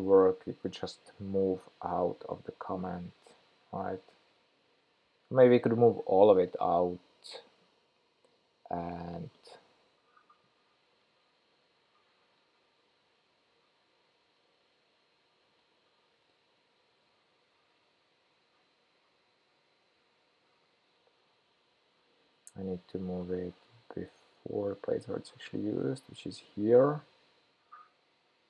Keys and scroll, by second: 19.9 super+x.